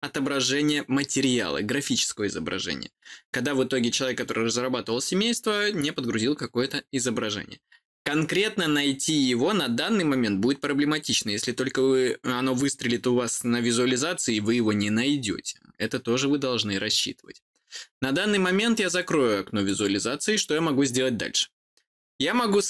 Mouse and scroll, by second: 19.6 click.